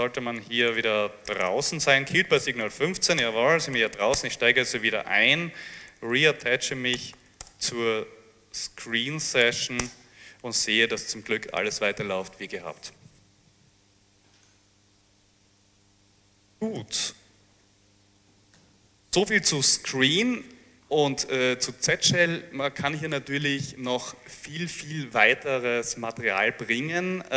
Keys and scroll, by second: 0.2 s, 1.3 Return, 1.5 Return, 1.7 Return, 2.6-3.7 typing, 4.0 Up, 4.2 Return, 5.3-9.7 typing, 9.9 Return, 16.9 alt+Tab, 18.6 Page_Down.